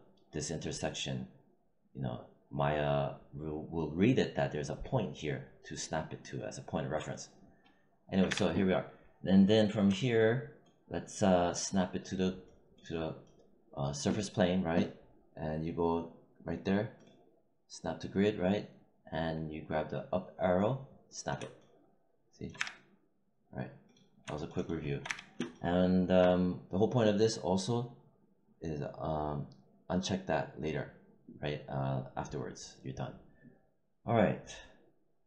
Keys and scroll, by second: 8.2 w, 22.5 w, 25.0 w.